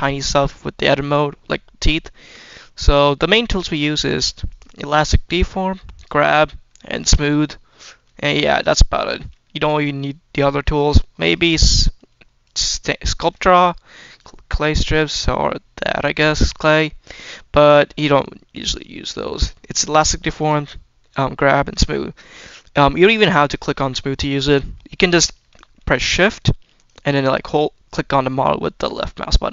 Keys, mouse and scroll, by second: 0.1 shift+middle click, 0.4 scroll up 1, 1.4 shift+middle click, 1.7 shift+scroll down 1, 2.0 shift+middle click, 2.6 middle click, 4.3 click, 5.8 click, 6.8 click, 7.8-8.8 scroll down 2, 8.8 click, 9.3 shift+middle click, 10.1-10.9 scroll up 3, 12.3 click, 13.0 scroll down 1, 13.9 click, 15.7 click, 19.5 click, 20.2 click, 21.5 click, 22.7 click, 24.2 scroll down 1, 24.5 middle click, 25.1 shift+middle click, 26.7 shift+click.